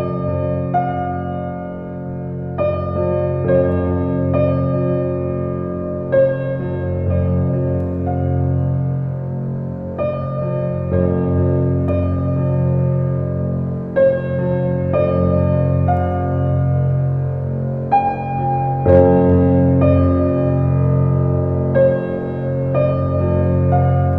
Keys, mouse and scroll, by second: 3.0 Tab, 3.6 alt+z, 4.8 scroll up 1, 4.8-8.2 middle drag, 8.2 Tab, 9.5 alt+z, 10.3-13.1 middle drag, 13.1 Tab, 13.6 Tab, 13.8 Tab, 14.1 Tab, 14.6-16.3 middle drag, 17.8 Tab, 18.7 alt+z, 19.6-20.3 scroll up 2, 24.0 Tab.